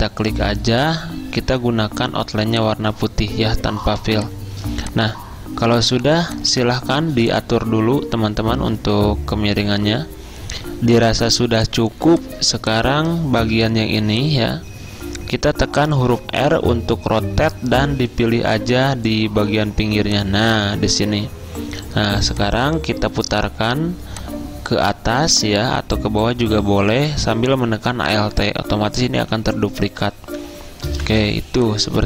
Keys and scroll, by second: 4.1 v, 7.2 r, 11.3-13.5 typing, 16.2 r, 19.8 r, 31.0-32.0 typing.